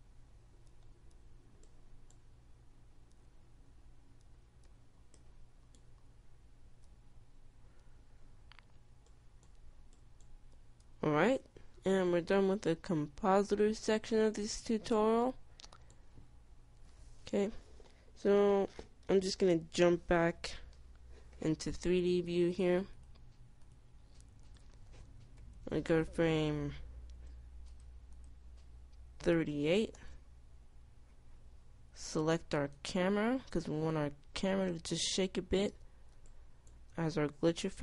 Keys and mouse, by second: 2.0 i, 2.4 i, 4.4 i, 5.4 i, 5.8 i, 8.2 i, 12.1 Tab, 26.6 F11, 28.9-30.1 drag, 33.7-35.5 drag, 36.2-37.8 middle drag.